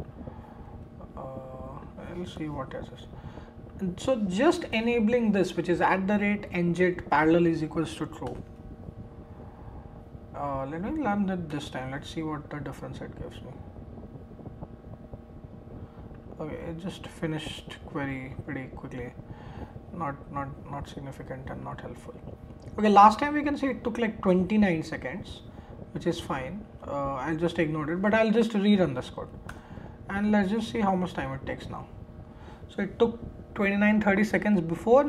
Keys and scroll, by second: 0.7 super+v, 2.3 BackSpace, 4.2 BackSpace, 8.2 shift+Return, 11.5 shift+Return, 29.5 shift+Return.